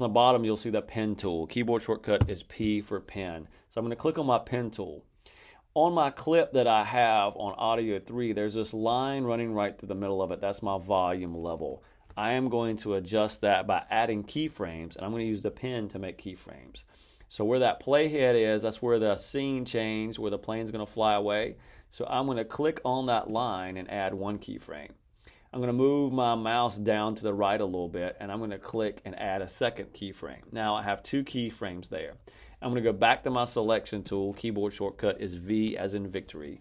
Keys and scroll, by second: 2.1 p.